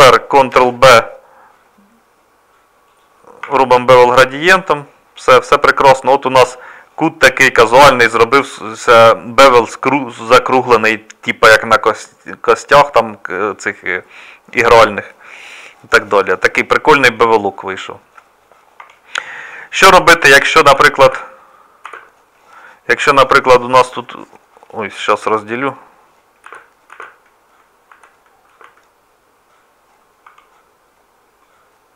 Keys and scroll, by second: 0.5 ctrl+b, 3.4 Tab, 18.8 Tab, 20.2 ctrl+z, 20.7 ctrl+z, 21.0 ctrl+z, 21.9 ctrl+z, 23.8 ctrl+r, 26.5 ctrl+z, 26.9 ctrl+z, 27.9 ctrl+z, 28.5 ctrl+z, 30.3 Tab.